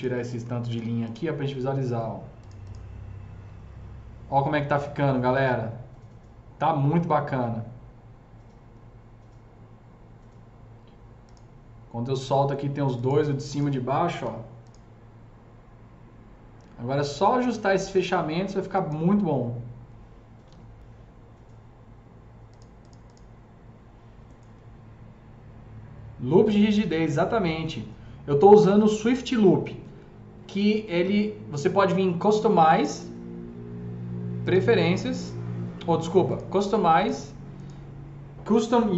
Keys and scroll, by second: 0.2 F3, 0.6 F3, 0.6 F4, 14.2 ctrl+alt+q, 20.4 alt+q, 24.5 F3.